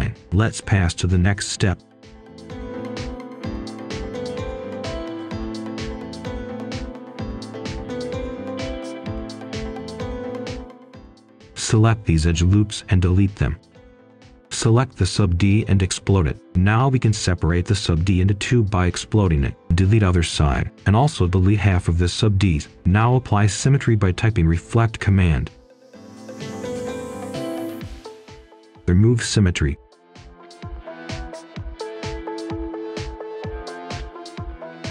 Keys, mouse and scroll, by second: 0.1 scroll down 1, 0.3 scroll up 1, 0.6 right click, 2.9 click, 6.4-7.1 scroll down 1, 7.1 right click, 8.9-9.5 scroll up 1, 9.5 right click, 9.7-10.4 scroll up 1, 10.9 ctrl+shift+click, 13.6-14.9 scroll down 1, 14.9 Delete, 15.3 click, 17.8 Delete, 18.1 right click, 18.6 ctrl+shift+click, 19.7 Delete, 20.2 click, 21.1 typing, 21.4 Return, 22.4 click, 23.2-23.8 scroll up 1, 23.8 click, 24.9 shift+click, 25.6 right click, 26.6-27.1 scroll down 1, 27.1 click, 27.4 Escape, 27.7-29.4 typing, 29.5 Return, 30.4 click, 30.7-31.1 scroll down 1, 31.1-31.4 scroll up 1, 31.4 Tab, 32.9 click, 33.5 scroll down 1, 33.8-34.1 scroll up 1, 34.1-34.9 right drag.